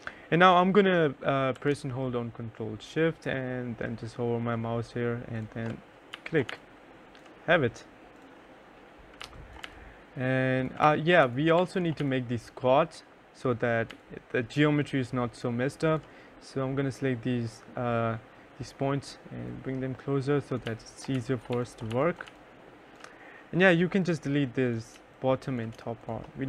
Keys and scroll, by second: 5.5 2, 5.8 3, 8.5-11.8 typing, 19.8-22.1 typing, 24.3 3, 26.2 Delete.